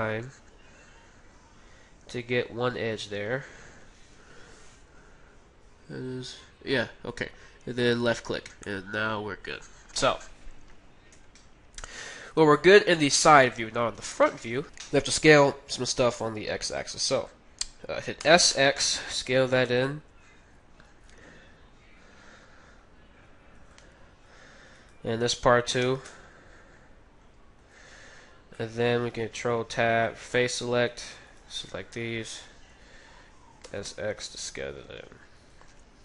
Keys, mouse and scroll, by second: 8.7-10.7 middle drag, 11.8-14.5 middle drag, 12.4 z, 13.9 KP_1, 18.2 s, 24.7-26.5 right drag, 25.8 s, 28.6-30.0 middle drag, 29.2 ctrl+Tab, 30.7-32.0 middle drag, 30.9-32.9 right drag, 32.1 KP_1, 33.7 s.